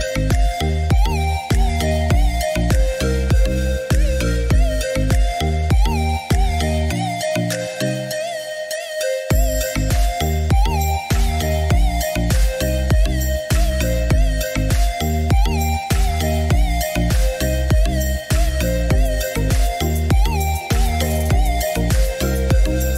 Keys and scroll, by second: 2.8-4.1 typing, 12.0 Escape, 14.0 Delete, 16.9 Delete.